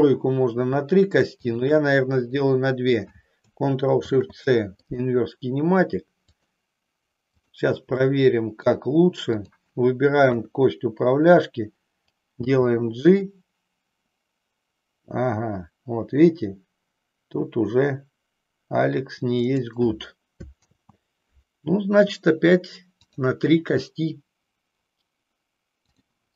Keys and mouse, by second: 1.5-2.7 shift+drag, 3.9 ctrl+shift+c, 6.4 click, 7.3 click, 8.0 middle click, 9.4-10.5 drag, 10.5 KP_3, 12.4 g, 20.8 ctrl+z, 25.9 click.